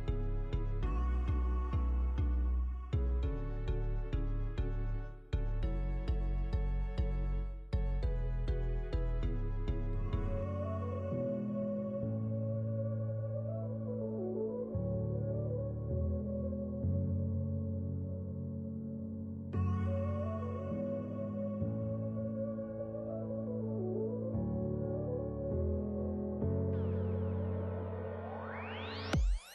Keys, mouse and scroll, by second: 0.2 middle click, 0.6 scroll up 1, 1.1 middle click, 1.6 middle click, 2.4 alt+z, 3.1 alt+click, 3.7 KP_1, 4.6 shift+d, 5.1 p, 5.7 click, 5.9 click, 6.4 Tab, 6.6 click, 6.8 click, 7.0 click, 7.2 t, 7.9 click, 8.5 Tab, 8.8 a, 9.4 alt+z, 9.5-10.1 scroll up 5, 9.7 shift+middle click, 10.1-10.4 scroll down 1, 10.4 s, 11.6 e, 13.5 shift+middle click, 13.8 f, 14.3 middle click, 14.6-14.9 scroll up 4, 14.7 KP_1, 14.9 scroll down 3, 15.2 ctrl+z, 15.4 f, 16.7 click, 17.7 click, 18.4 click, 19.8 click, 20.4 click, 20.7 click, 24.2 Tab, 24.4 click, 25.0 alt+z, 25.4 alt+z, 25.4 click, 25.6 click, 26.9 g, 28.2 Tab, 28.5 Tab, 28.7 click, 29.0 alt+z, 29.1 right click.